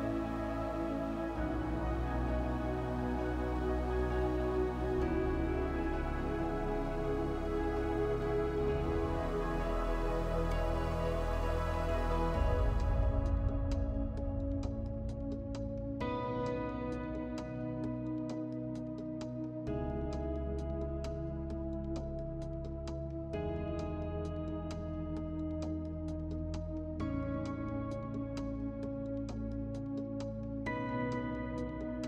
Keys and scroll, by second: 28.0 space.